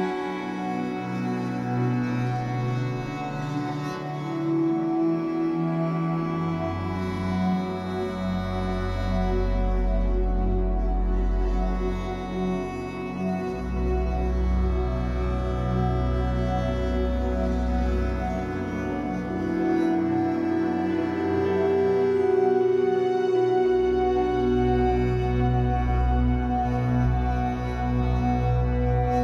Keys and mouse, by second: 1.3-12.5 drag, 13.6-29.2 drag.